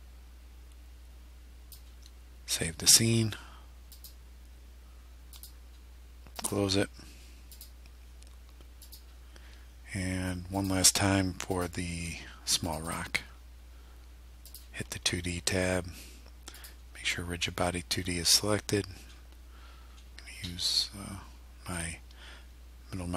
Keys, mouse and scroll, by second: 4.0 click, 5.4 click, 6.4 click, 7.6 click, 8.9 click, 10.6 click, 11.6 click, 12.7 click, 14.5 click, 16.6 click, 18.4-18.8 scroll down 2, 19.1-19.4 scroll down 2, 19.9-20.2 scroll up 2, 20.5 middle click.